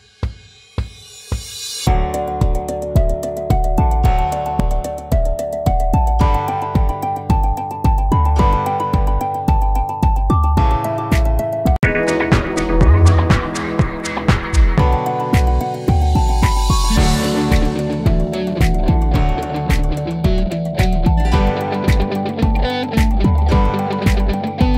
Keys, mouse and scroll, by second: 1.1 shift+click, 2.3-2.8 typing, 3.3 click, 5.3 right click, 6.8 click, 9.9 ctrl+z, 11.3 click, 16.9 click, 20.0 click, 23.0 click, 23.1 click.